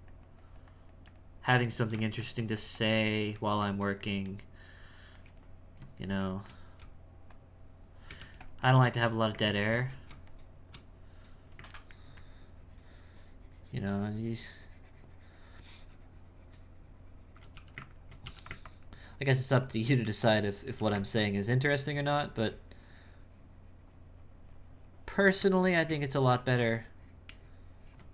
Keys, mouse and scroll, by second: 2.2-3.4 shift+drag, 3.4-6.8 shift+middle drag, 6.8 space, 8.2 f, 8.6 click, 9.4 ctrl+z, 9.7 ctrl+z, 10.0 space, 11.8 ctrl+middle click, 12.2-15.2 ctrl+drag, 18.2 e, 18.6-20.7 ctrl+drag, 21.2-24.2 ctrl+drag, 25.8 ctrl+z, 26.3-28.1 ctrl+drag.